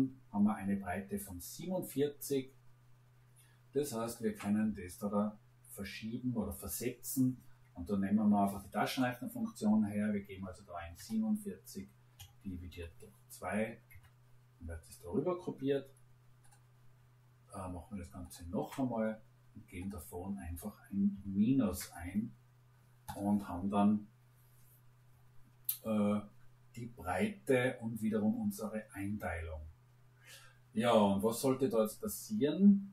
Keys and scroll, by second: 10.7 4, 10.9 7, 12.1 /, 12.6 2, 13.9 Return, 21.1 -, 21.6 Return.